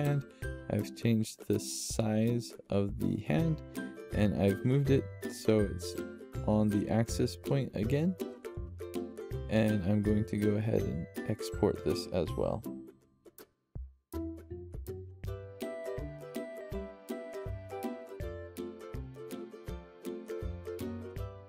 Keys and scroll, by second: 5.8-6.5 typing, 15.1-16.3 typing.